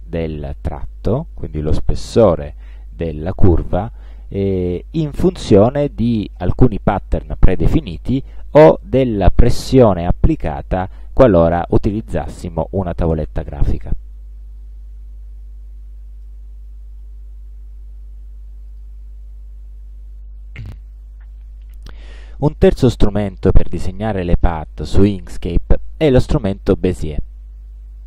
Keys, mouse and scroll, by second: 16.3 space, 17.8 Delete, 18.8 click, 20.1 Delete.